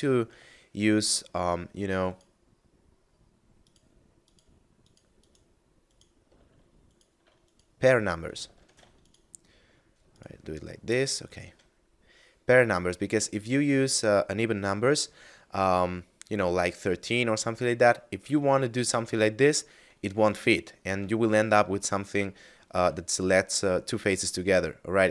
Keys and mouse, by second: 1.8 alt+shift+right click, 3.6 alt+shift+right click, 4.1 alt+shift+right click, 4.7 alt+shift+right click, 5.2 alt+shift+right click, 5.7 alt+shift+right click, 6.8 alt+shift+right click, 7.3 right click, 8.3 ctrl+z, 8.9 shift+right click, 10.0 shift+right click, 10.8 shift+middle click, 11.6 middle click, 18.7 shift+middle click, 21.2 right click, 22.0 right click, 24.7 middle click.